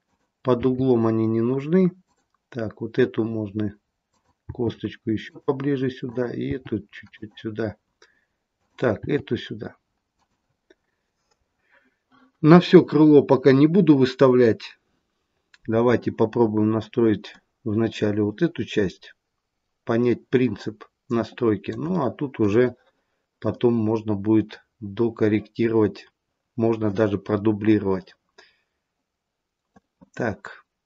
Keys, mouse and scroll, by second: 0.0 click, 0.4 g, 4.0 click, 4.3 g, 6.0 click, 6.4 g, 8.5 click, 8.9 g, 17.2 middle click, 21.9 shift+middle click, 23.4 middle click, 27.6 middle click, 30.7 click.